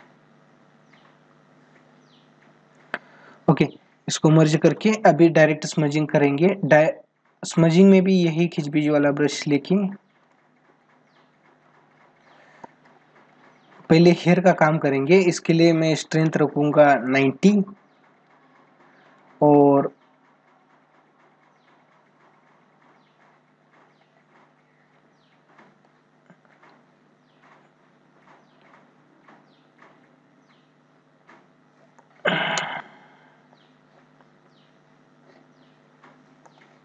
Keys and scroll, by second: 11.4 ctrl+-, 12.3 space, 14.3 ctrl+=, 17.7 ctrl+=, 31.7 space, 36.2 space.